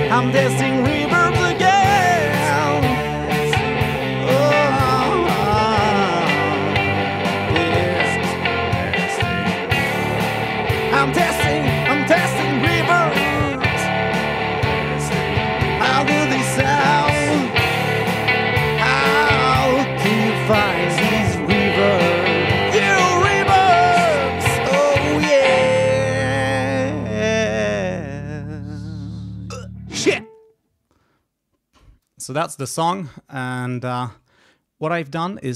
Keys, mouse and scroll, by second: 31.7 click, 32.6 space, 33.5-34.4 scroll up 4.